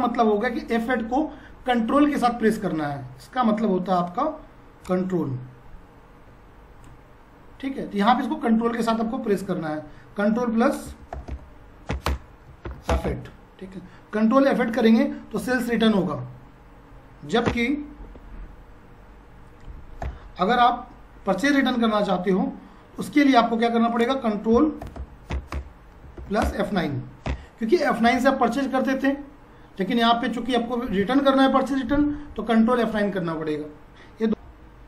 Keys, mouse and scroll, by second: 4.8-9.3 shift+drag, 9.3 t, 10.7 click, 10.8-13.0 typing, 17.5 Return, 19.4-20.5 typing, 24.0 click, 24.3-27.3 typing, 34.5 F4.